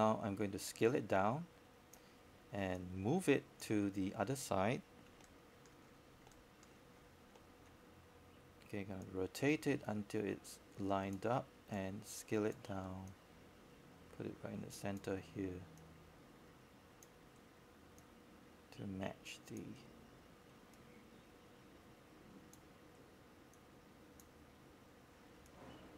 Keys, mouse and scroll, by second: 1.2-2.6 right drag, 3.4 click, 4.3 shift+click, 5.1 shift+click, 5.6 shift+click, 6.2 shift+click, 7.2 shift+click, 9.5-10.6 drag, 17.6-18.2 scroll down 1, 18.6-20.6 scroll down 1, 20.6-25.2 drag, 25.2-25.9 scroll up 1.